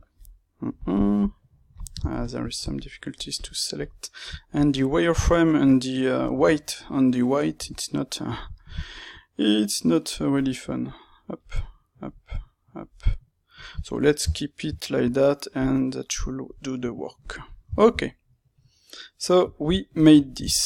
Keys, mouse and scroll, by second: 2.7-3.8 drag, 3.8-5.1 middle drag, 5.1-6.3 drag, 6.3-10.7 ctrl+middle drag, 7.6 Tab, 10.7 click, 10.8 middle click, 11.5 click, 11.6 middle click, 12.2 click, 12.3-14.7 middle drag, 14.2 Tab, 14.7-16.0 alt+right drag, 16.0-17.1 middle drag, 17.1 click, 17.2-20.6 middle drag.